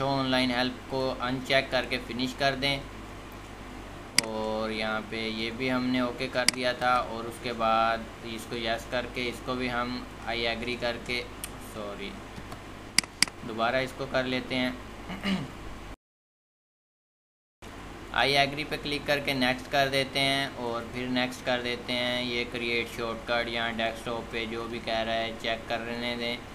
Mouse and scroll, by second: 8.3 middle click.